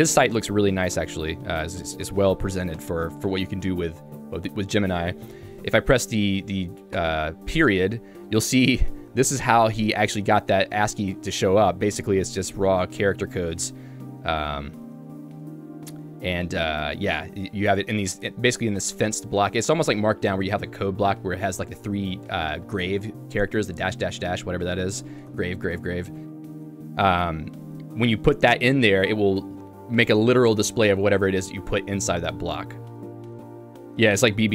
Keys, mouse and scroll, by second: 1.0 ctrl+u, 2.1 ctrl+u, 7.2 ., 8.6 k, 12.1 g, 13.2 ctrl+g, 14.4 ctrl+u, 14.6 ctrl+u, 14.8 ctrl+u, 15.2-17.1 typing, 18.1 h, 18.5 shift+v, 21.8 Escape, 22.2 h, 24.7-27.8 typing.